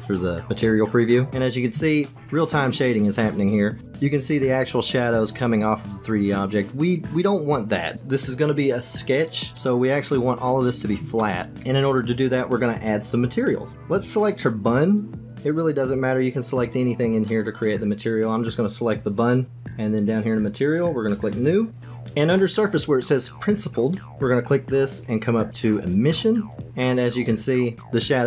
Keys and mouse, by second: 1.0 click, 3.8 shift+click, 11.1 shift+middle click, 20.0 click, 21.3 click, 21.7 click, 23.9-26.4 drag, 27.2 click.